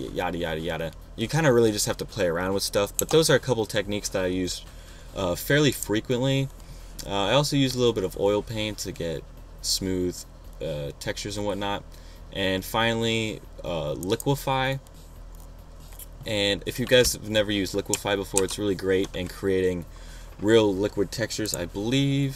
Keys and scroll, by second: 3.2 BackSpace, 18.7 super+-.